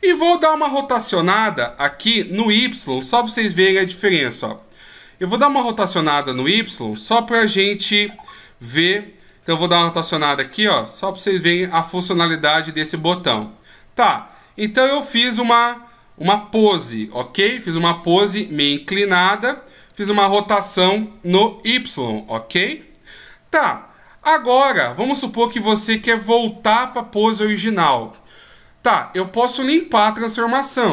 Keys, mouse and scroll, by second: 3.9 r, 7.4 KP_5, 9.2 right click, 9.8 r, 12.6 right click, 12.8 r, 15.1 right click, 15.4 r, 18.5 right click, 19.1 r.